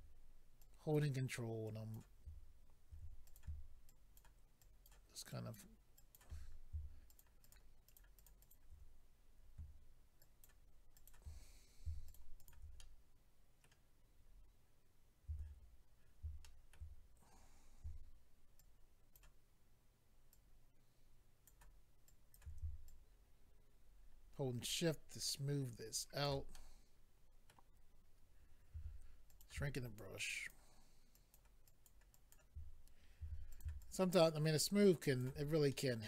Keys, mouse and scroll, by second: 0.6 ctrl+click, 1.6 ctrl+click, 2.9 f, 3.2 click, 3.4 click, 3.9 ctrl+click, 4.2 click, 4.6 ctrl+click, 5.3 ctrl+click, 6.0 ctrl+click, 6.1 ctrl+click, 7.1 shift+click, 7.2 shift+click, 7.4 shift+click, 7.5 shift+click, 7.8 shift+click, 8.0 shift+double click, 8.1 shift+click, 8.2 shift+click, 8.4 shift+click, 8.5 shift+double click, 9.2-9.7 scroll down 2, 10.2 ctrl+click, 10.9 ctrl+click, 11.1 ctrl+click, 11.5-12.0 scroll down 1, 12.0 shift+click, 12.1 ctrl+click, 12.4 ctrl+click, 12.8 middle click, 14.2-14.9 scroll up 3, 16.4 shift+middle click, 16.9-17.8 scroll up 1, 18.6 ctrl+click, 20.3 ctrl+click, 22.0 ctrl+click, 22.8 shift+click, 26.5 middle click, 28.7 f, 29.3 click, 29.7 ctrl+click, 30.3 click, 31.1 ctrl+click, 31.7 ctrl+click, 32.1 ctrl+click, 33.2 f, 33.5 click, 33.6 click, 33.8 shift+click, 35.7 middle click.